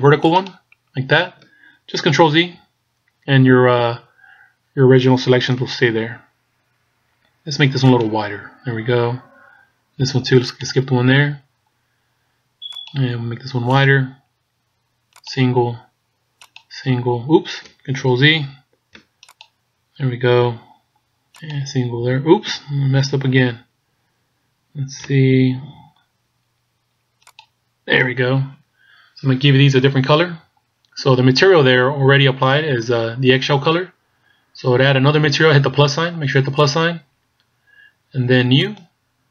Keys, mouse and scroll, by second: 2.6 ctrl+z, 7.9 alt+shift+right click, 18.4 ctrl+z, 19.4 alt+shift+right click, 23.2 ctrl+z, 27.3 alt+shift+right click, 28.8 scroll down 1, 36.6 click, 38.6 click.